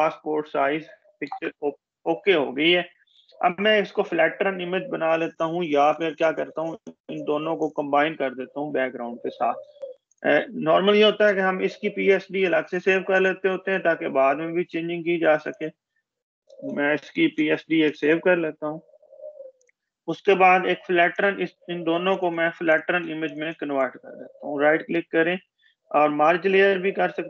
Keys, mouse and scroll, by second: 0.0 ctrl+-, 6.9 click, 9.8 click, 11.0 ctrl+s, 13.5 click, 15.0 scroll down 1, 15.3 click, 16.1-17.5 typing, 19.4 click, 21.5 shift+Caps_Lock, 22.0 click, 23.4 right click.